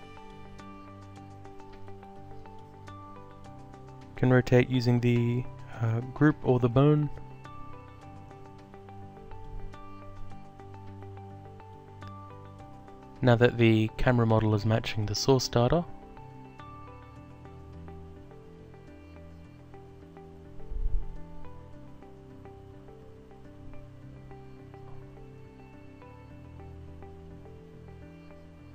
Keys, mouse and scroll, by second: 4.2 click, 7.9 click, 11.1 alt+click, 14.5 click, 16.4 alt+click, 17.8 click, 19.9 click, 22.9 click, 24.2 alt+click, 28.1 alt+click.